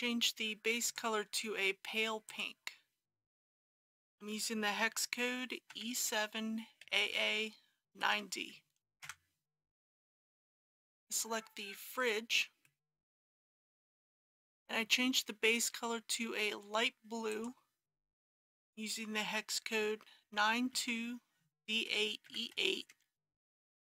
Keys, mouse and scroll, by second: 0.9 click, 5.7 e, 6.1 KP_7, 6.9 a, 7.9 KP_9, 8.1 d, 10.2 click, 12.7-14.3 middle drag, 14.3 Return, 17.3 click, 20.2-22.3 typing.